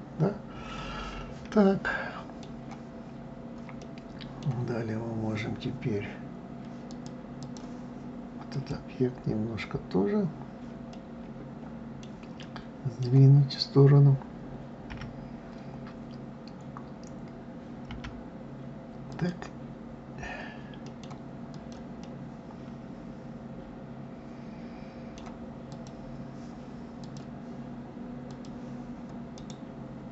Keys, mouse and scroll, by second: 3.8-6.8 middle drag, 6.9-8.7 drag, 10.9-14.9 middle drag, 14.9 KP_1, 17.9 g, 20.8 middle click, 21.5 click, 22.0-25.1 middle drag, 25.7 click, 27.0-29.3 drag, 29.3-30.1 right drag.